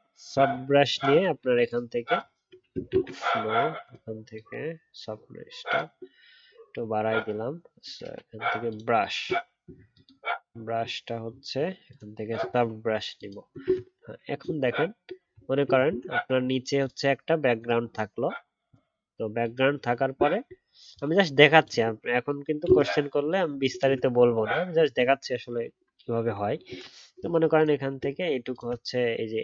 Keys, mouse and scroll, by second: 2.9 ctrl+z, 13.6 ctrl+z, 28.5 shift+click.